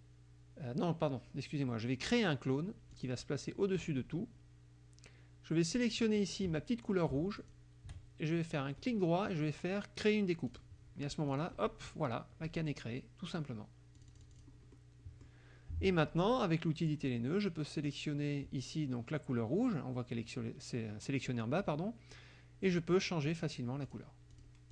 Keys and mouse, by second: 2.9 click, 6.1 middle click, 7.4 shift+click, 8.8 right click, 10.5 click, 11.4 click, 12.5 -, 14.0 click, 14.8 middle click, 16.9 click, 17.9 click, 22.7 click, 23.3 click, 23.9 click, 24.4 click.